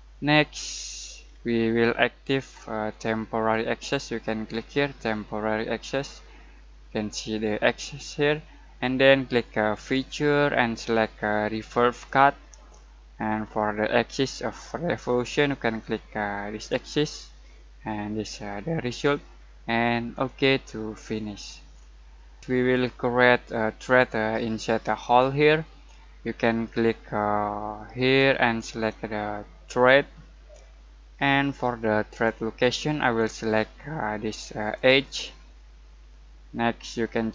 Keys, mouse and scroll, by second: 0.7-1.2 scroll down 1, 1.2-2.3 scroll up 1, 2.8 click, 5.8 click, 9.8 click, 16.5 click, 20.1 click, 20.1 click, 21.4 scroll down 1, 21.7-22.3 scroll up 1, 22.5-26.4 middle drag, 27.9 click, 32.1 click, 34.7 click.